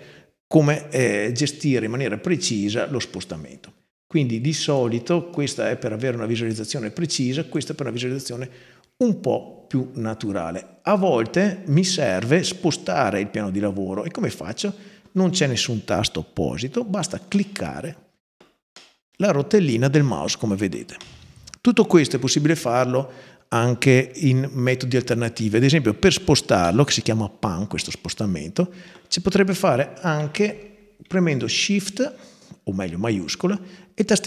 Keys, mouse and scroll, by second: 2.3 click, 4.5 click, 5.1 right click, 7.3 click, 17.1-18.2 middle drag, 18.6-19.3 middle drag, 19.7-20.3 middle drag, 20.8-21.7 middle drag, 26.4-27.2 middle drag, 27.6-28.5 middle drag, 31.2-33.4 shift+right drag.